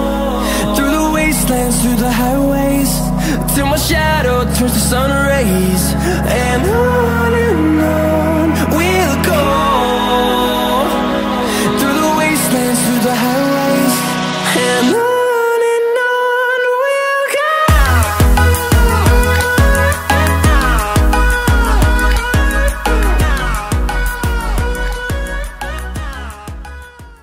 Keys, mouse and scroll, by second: 0.1 click, 8.3 click, 11.8 click.